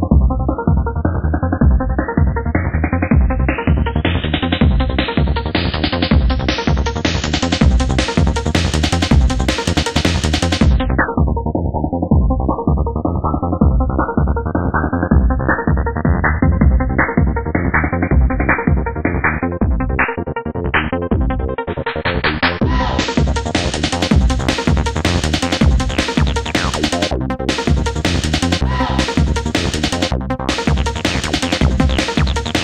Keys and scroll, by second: 17.3 ], 18.7 ], 22.5 ].